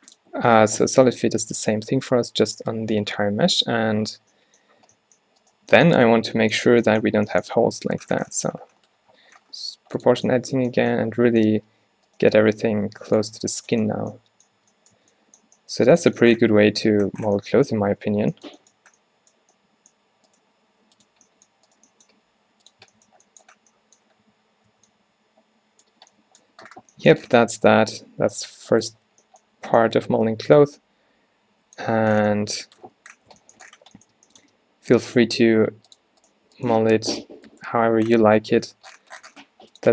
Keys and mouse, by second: 5.0 Tab, 6.8 o, 7.7 g, 10.3 Tab, 10.9 Tab, 11.7 Tab, 12.0 Tab, 12.3 g, 13.2 click, 13.3 Tab, 13.5-13.9 middle drag, 14.0 a, 14.7 Tab, 15.1 Tab, 17.9 Tab, 20.6 g, 22.2 g, 22.9 Tab, 24.4 a, 24.8 a, 29.2 a, 33.9-34.5 middle drag, 34.5 Tab, 35.1 g, 36.8 g, 37.8 g.